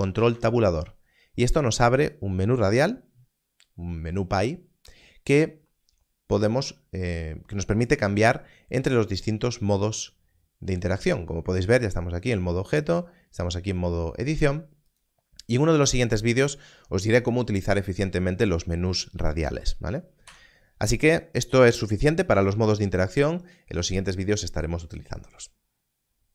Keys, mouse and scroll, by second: 0.2 ctrl+Tab, 14.8 ctrl+Tab, 14.9 click, 20.2 Tab.